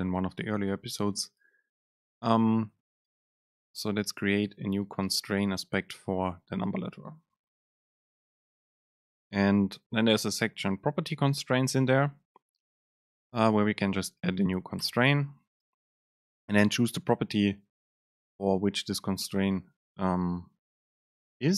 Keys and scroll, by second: 14.9 Return, 16.4 super+space.